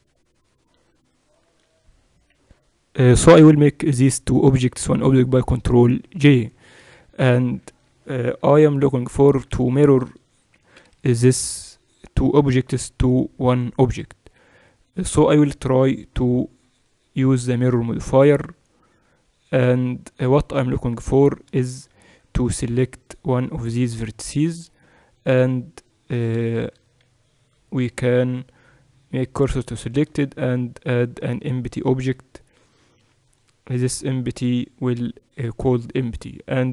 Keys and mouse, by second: 0.0 Tab, 1.3-3.2 right drag, 5.9 ctrl+j, 8.5 KP_7, 10.7 n, 12.6-14.5 typing, 16.3-18.7 drag, 22.0 Tab, 22.0 middle click, 22.5-25.7 drag, 23.8 right click, 24.6-26.3 right drag, 26.6 shift+s, 29.9 Tab, 30.3 shift+a, 36.5-36.7 right drag.